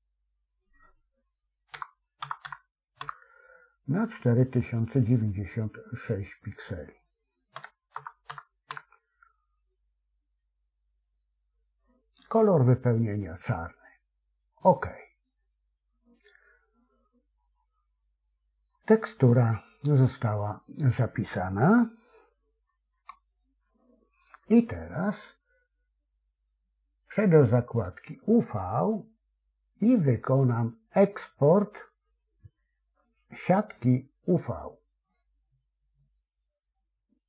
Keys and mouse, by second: 22.9 a, 28.8-36.0 drag.